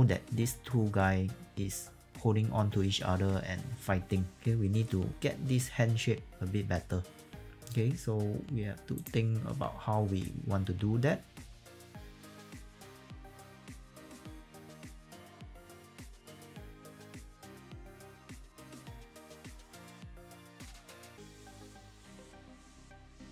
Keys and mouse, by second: 8.9 click, 9.4 e, 10.2 click, 11.2-23.3 typing, 11.6 click, 11.7 alt+click, 11.9 click, 12.4 ctrl+z, 12.8 alt+click, 12.9 alt+right click, 13.0 alt+click, 13.2 click, 13.4 alt+click, 14.0 click, 15.0 click, 15.2 click, 15.9 click, 16.0 click, 16.5 click, 17.1 alt+click, 17.2 alt+right click, 17.7 click, 18.3 click, 18.7 click, 19.2 click, 19.7 click, 20.5 click, 20.7 click, 21.4 click, 21.6 click, 22.7 click, 23.0 click.